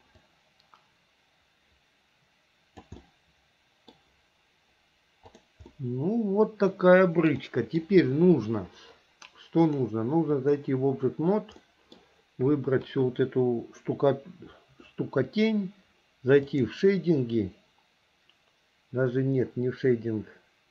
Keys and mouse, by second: 0.5-3.0 drag, 3.2 middle click, 5.4 click, 5.8-7.5 middle drag, 7.6 middle click, 9.8-10.8 drag, 11.8 middle click.